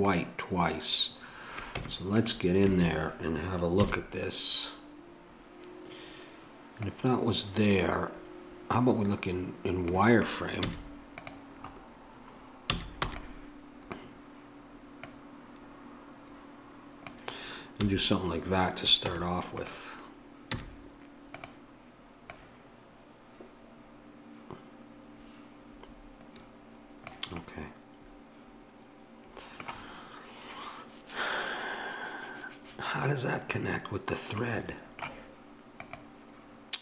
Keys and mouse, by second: 1.8 Tab, 2.7 a, 3.8 KP_3, 6.8-9.8 drag, 11.6-12.6 middle drag, 12.6 a, 15.0-17.1 drag, 17.8 a, 19.1 Tab, 20.5 z, 22.2-27.1 drag, 27.4-36.8 middle drag.